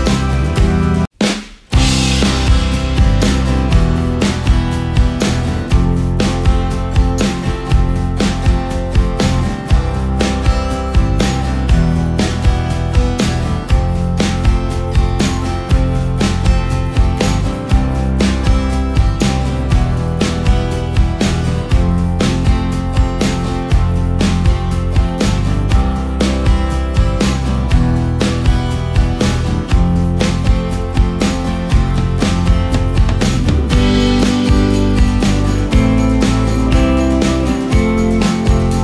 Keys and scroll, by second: 16.4 ctrl+x, 18.0 Delete, 19.1 ctrl+f, 19.7 ctrl+g, 20.5 space, 34.3 ctrl+space.